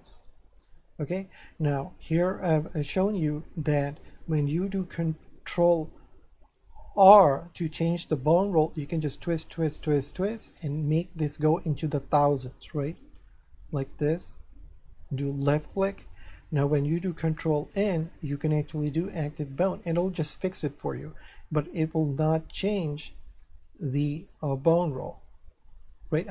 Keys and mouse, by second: 2.5 shift+middle click, 7.2 ctrl+r, 10.4 right click, 13.5 ctrl+r, 15.2 click, 17.6 ctrl+n, 19.3 click, 23.4 ctrl+r, 25.6 click.